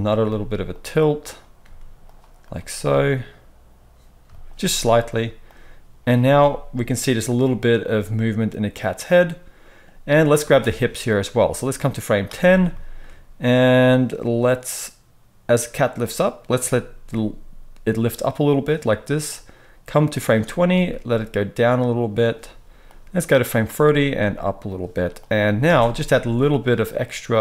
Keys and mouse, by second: 0.2 r, 1.6 r, 2.3 click, 2.4-5.4 middle drag, 2.7 r, 5.4-10.6 drag, 6.2 space, 10.4 space, 10.6 middle click, 11.4-18.6 drag, 17.0 r, 18.6-19.2 middle drag, 19.2-22.3 drag, 20.6 r, 22.3-22.8 middle drag, 22.8-24.7 drag, 23.9 r, 24.7-25.1 middle drag, 25.1-27.4 drag, 25.6 space.